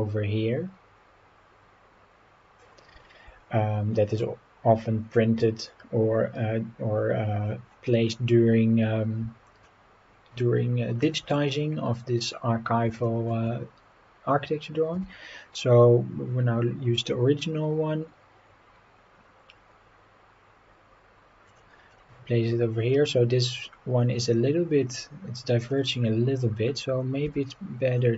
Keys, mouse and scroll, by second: 5.7 scroll down 1, 6.8 scroll down 1, 8.9 scroll down 1, 9.7-11.1 shift+middle drag, 11.4-11.8 scroll up 5, 12.2 scroll up 2, 13.1 shift+middle drag, 15.0 g, 21.5 click, 21.9-22.3 scroll down 3, 23.1-23.6 scroll up 5, 25.7-26.1 scroll down 3, 27.3 g.